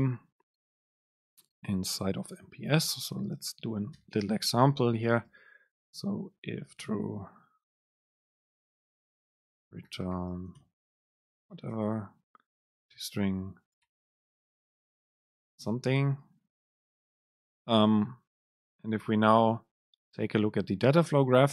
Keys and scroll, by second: 2.6 Down, 3.1 End, 3.5 shift+Up, 4.1 BackSpace, 7.3 Down, 9.3 BackSpace, 12.8 End, 13.1 Return, 16.3 Up, 16.8 Down, 17.0 BackSpace.